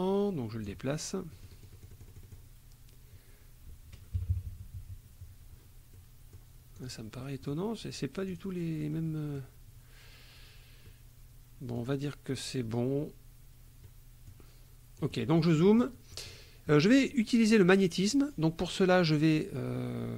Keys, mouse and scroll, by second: 1.3-2.5 middle drag, 4.1 KP_Subtract, 5.9 middle click, 6.7 click, 7.2 middle click, 8.3 click, 8.9 middle click, 10.8-11.9 middle drag, 13.8 click, 15.0-16.0 middle drag, 16.1 middle click.